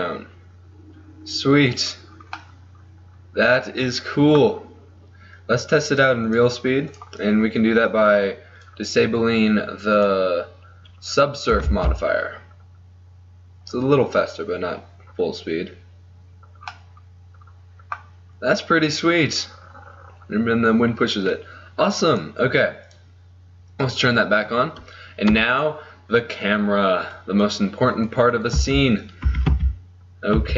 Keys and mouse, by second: 2.1 middle click, 4.5 middle click, 6.1-11.9 drag, 11.7 alt+a, 16.4-17.7 middle drag, 19.3-21.1 middle drag, 22.3-25.6 drag, 25.3 KP_0, 26.4-27.5 middle drag, 27.5-29.7 right drag, 28.7 z, 29.4 r.